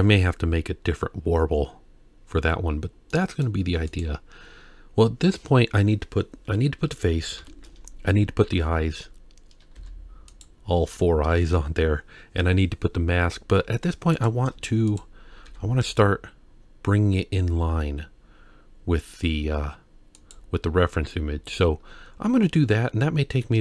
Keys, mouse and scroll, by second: 2.8 scroll down 2, 3.1-3.4 middle drag, 3.9 click, 7.4 KP_1, 9.7 z, 14.2 click, 14.9 click, 15.5 g, 21.8-22.3 scroll up 1, 22.3-23.3 scroll up 1, 23.3-23.6 scroll up 1.